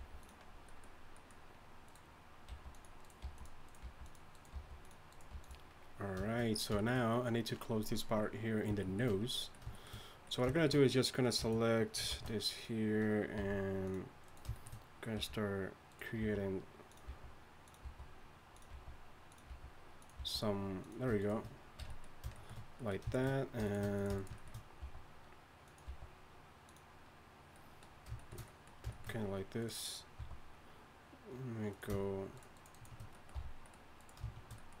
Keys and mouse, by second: 0.0 g, 2.5-5.3 typing, 11.2 right click, 12.1-13.4 drag, 12.1 shift+d, 13.4 r, 14.2 click, 15.2 r, 16.2-20.2 typing, 21.2 right click, 21.8 f, 23.3 f, 24.8 e, 25.9 e, 28.2 click, 28.4-30.2 drag, 30.2 e, 33.0-34.8 drag, 33.7 f.